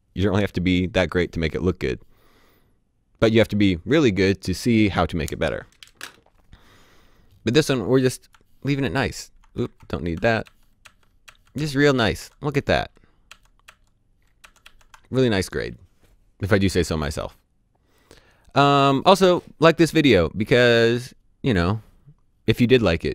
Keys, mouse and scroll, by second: 8.6 s, 9.5 ctrl+z, 10.4-14.6 typing.